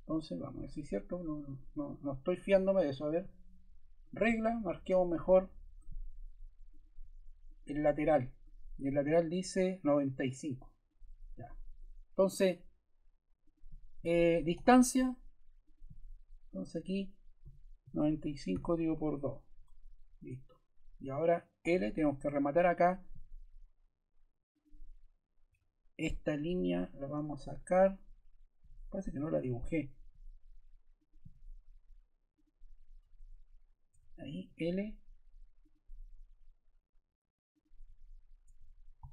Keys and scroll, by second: 14.5 d, 17.4 9, 17.8 5, 18.4 7, 18.8 2, 19.5 Return, 21.5 l, 25.4 Escape, 27.1 BackSpace, 29.4 l, 33.8 Escape, 34.4 l, 38.4 Escape, 38.9 e.